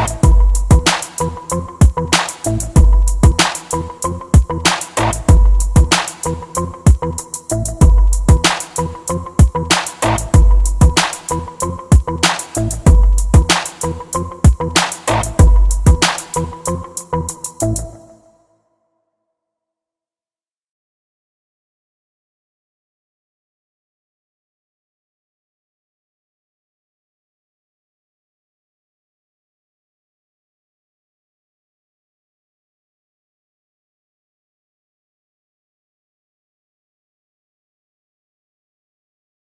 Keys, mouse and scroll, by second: 1.4-6.7 drag, 8.0 e, 9.9-11.7 drag, 13.9 g, 15.2 g, 16.5-18.3 drag, 19.3-20.3 drag, 21.1-22.9 drag, 21.7 alt+a, 38.1 alt+a.